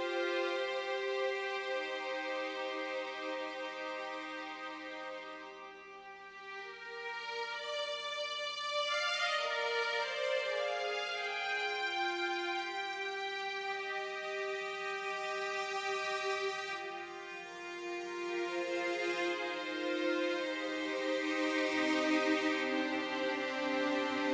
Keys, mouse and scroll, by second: 3.7-7.1 drag, 9.4-11.0 drag, 13.7-15.3 drag, 15.5 click, 18.5-20.3 drag.